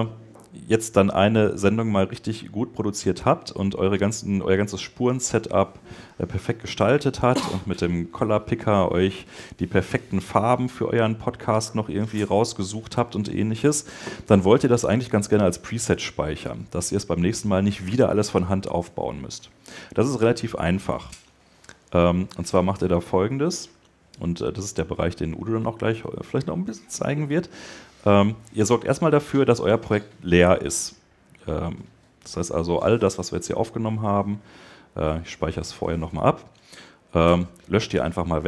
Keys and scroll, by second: 37.0 BackSpace.